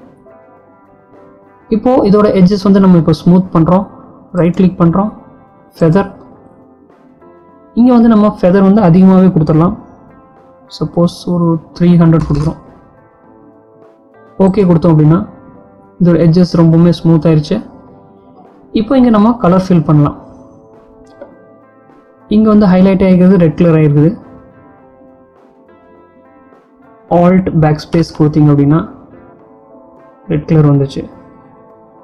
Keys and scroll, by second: 27.2 alt+BackSpace.